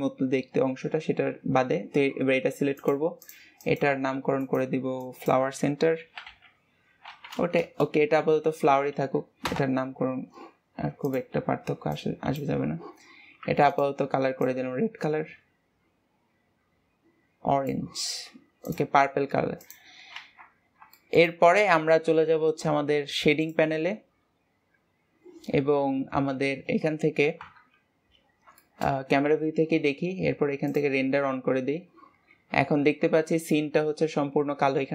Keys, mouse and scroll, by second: 1.3-2.1 scroll up 2, 2.7 click, 3.2-9.0 drag, 9.0 ctrl+s, 9.4 KP_0, 11.0 click, 13.7 click, 18.6 click, 19.5 click, 20.1 ctrl+s, 20.7 scroll down 1, 20.9 shift+middle click, 21.6 ctrl+s, 24.4-25.3 drag, 27.4 KP_0, 28.6-30.8 shift+middle drag, 30.8 click.